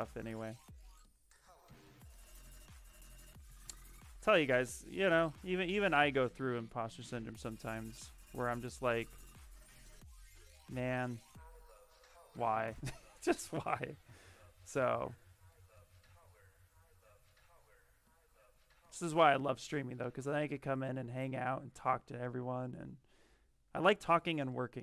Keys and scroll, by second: 3.5 s, 3.8 s, 6.3 z, 6.9 space, 11.1 s, 18.3 ctrl+z.